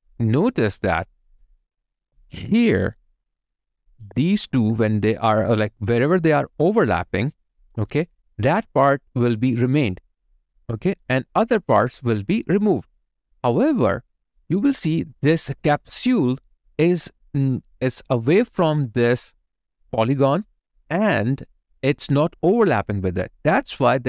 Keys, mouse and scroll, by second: 2.0 alt+right click, 2.7 alt+middle click, 4.4 shift+click, 15.6 alt+right click, 16.0 alt+click, 16.9 alt+right click.